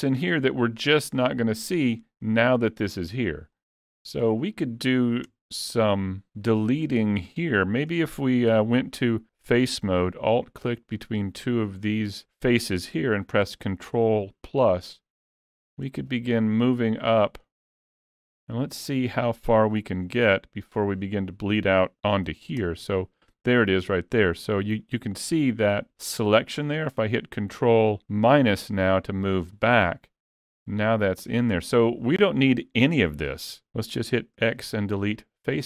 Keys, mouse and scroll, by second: 0.6 middle click, 5.3 Tab, 6.5 middle click, 8.5 3, 10.7 alt+click, 14.0 ctrl+KP_Add, 15.9 ctrl+KP_Add, 16.8 middle click, 18.1 middle click, 19.5-20.4 scroll up 2, 20.4 middle click, 22.6 ctrl+KP_Add, 28.2 ctrl+KP_Subtract, 29.9 middle click.